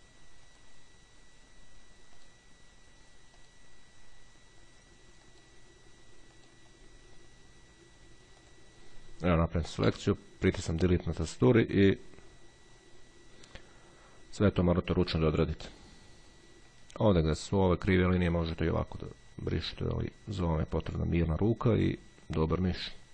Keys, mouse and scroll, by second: 2.1-3.0 drag, 6.4 click, 7.0-7.5 scroll up 1, 8.6 click, 9.8 Delete, 11.2-12.4 scroll down 2, 15.4-17.4 drag, 18.4-23.1 drag.